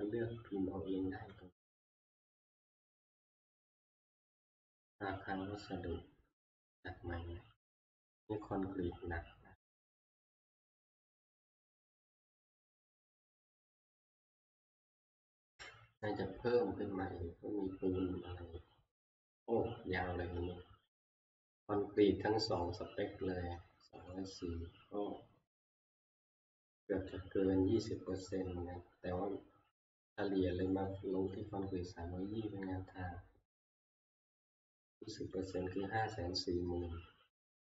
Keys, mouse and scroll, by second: 4.9 click, 4.9 scroll down 3, 8.6 click, 10.0 click, 10.0 scroll down 1, 11.6 click, 13.0 click, 22.7 click, 24.1 click, 26.1 click, 28.2 click, 28.2-29.1 scroll, 30.9 click, 31.7 scroll, 35.5 click.